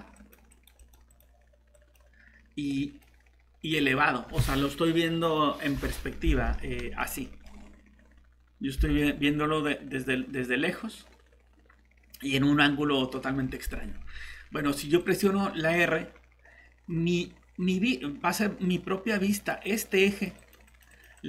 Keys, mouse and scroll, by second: 6.3 alt+Tab, 7.0 middle click, 7.5 scroll down 1, 15.0 click.